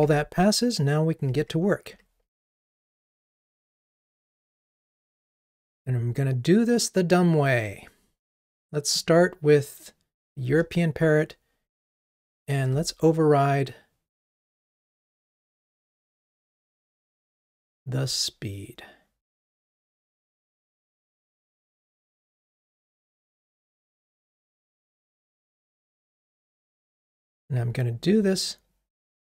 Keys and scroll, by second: 0.1 ctrl+Tab, 1.5 super+1, 12.1 ctrl+o, 17.1 Down, 25.6 alt+Up, 26.9 super+c.